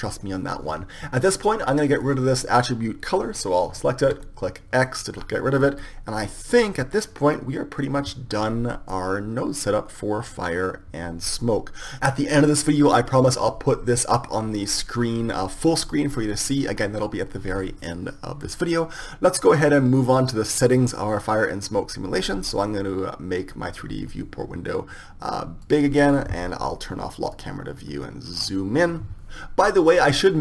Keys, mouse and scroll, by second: 2.7-16.5 right drag, 24.2 click, 24.9 click, 25.0-28.3 drag, 30.1-30.4 drag.